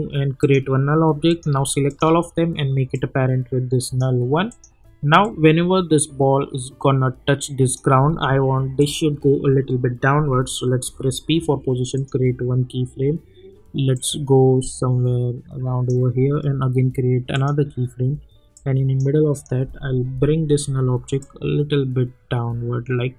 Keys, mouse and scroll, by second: 10.8 p, 11.9-16.1 drag.